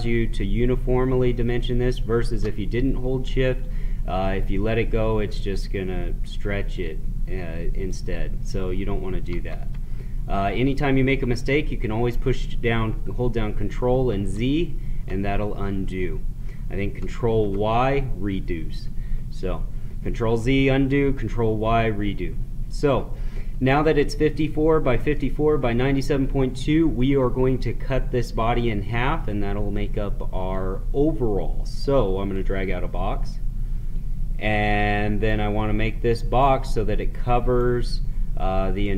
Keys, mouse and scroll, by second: 9.3 ctrl+z, 13.5 ctrl+z, 14.0 ctrl+z, 17.3 ctrl+y, 25.1-28.4 middle drag, 30.4-38.8 drag, 38.8-38.9 shift+drag.